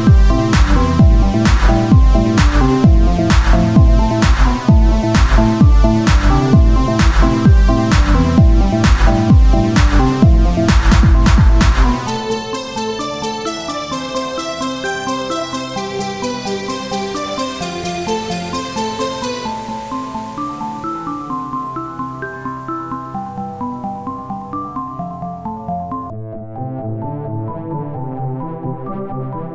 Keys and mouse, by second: 0.5 Tab, 1.8 z, 2.1-4.9 drag, 4.2 z, 4.9 z, 7.0 z, 8.5-13.7 drag, 11.6 z, 13.7 z, 14.3-15.5 drag, 15.5 z, 16.2 click, 16.3 z, 18.2 z, 18.6 Tab, 20.9 Tab, 24.9 click, 26.9 click, 26.9 right click, 27.8 Tab, 28.0 click.